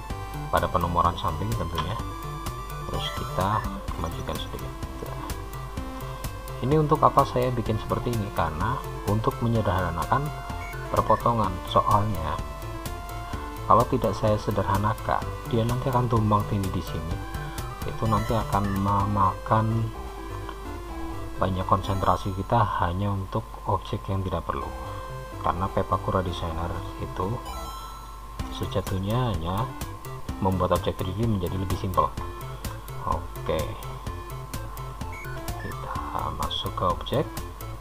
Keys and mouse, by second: 2.0 g, 5.0 click, 6.2-11.6 middle drag, 13.7-19.9 drag, 19.9-32.1 middle drag, 36.0 Tab.